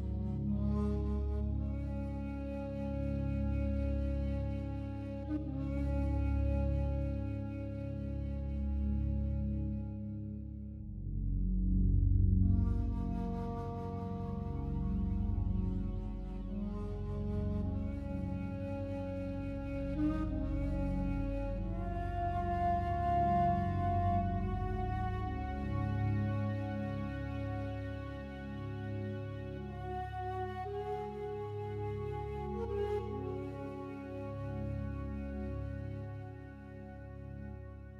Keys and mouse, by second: 0.3 click, 0.8 click, 1.8 click, 2.6 click, 2.9-4.0 drag, 4.7-5.4 drag, 7.0-8.1 ctrl+alt+drag, 8.1 7, 9.2 r, 9.5 z, 11.0 click, 11.4-12.5 alt+drag, 13.1 r, 13.4 x, 13.5 x, 14.1 click, 15.0 0, 16.5 alt+click, 16.9-17.4 typing, 18.0 alt+shift+click, 18.8 click, 20.0 click, 20.8 click, 21.5 click, 21.8 click, 26.0 click, 26.4 click, 27.2 click, 27.7 click, 29.3 click, 30.0-31.4 drag, 33.0 click, 34.1 click, 34.4 alt+click, 34.8 click, 36.8 click, 37.4 click.